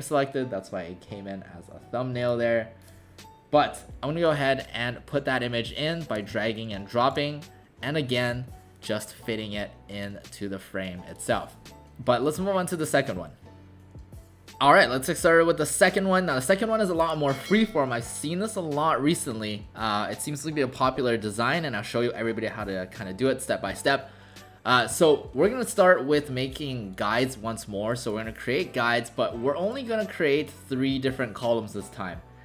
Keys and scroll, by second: 6.8 ctrl+alt+shift+c.